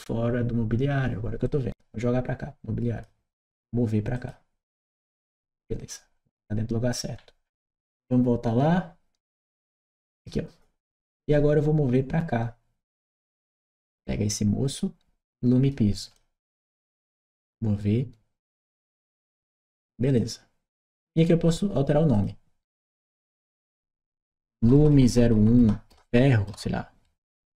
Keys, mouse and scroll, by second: 1.3-2.9 drag, 7.0-7.7 scroll down 3, 9.3 click, 10.7-11.2 scroll up 2, 13.8-16.0 drag, 18.4 click, 19.9 click, 21.3 click, 21.9 click, 23.0 click, 24.3 BackSpace, 27.3 shift+f.